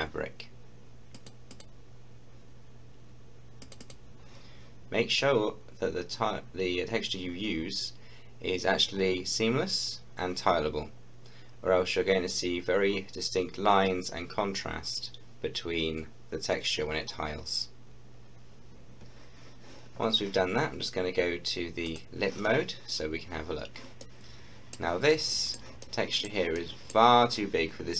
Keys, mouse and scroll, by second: 1.2 click, 3.6 click, 21.9 click, 22.9-23.3 scroll up 1, 24.0-27.9 middle drag.